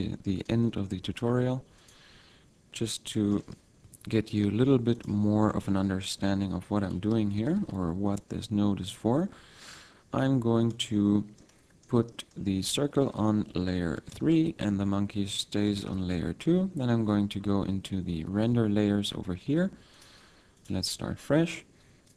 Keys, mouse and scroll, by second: 0.4 shift+a, 3.9 F6, 5.6 F6, 6.9 r, 8.1 s, 10.8 click, 11.4 middle click, 12.4 middle click, 13.5 m, 15.7 shift+3, 17.4-19.2 scroll up 17, 19.9 click, 20.5 click.